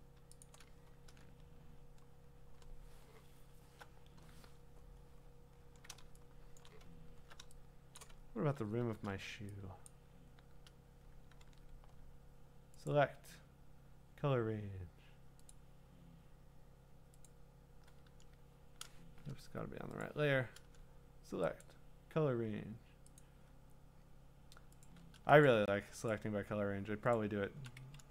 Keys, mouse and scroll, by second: 0.4 alt+click, 1.1-1.8 scroll, 5.2-6.0 scroll, 6.6 click, 7.0-7.4 scroll, 8.0 click, 8.2-8.8 scroll, 8.8 w, 9.9 click, 11.4 ctrl+d, 12.9 click, 15.5 click, 17.3 click, 19.3 Escape, 20.0 click, 21.6 click, 24.9 click, 25.5 click, 26.1 shift+click, 26.2 shift+click, 27.1 shift+click, 28.0 ctrl+z.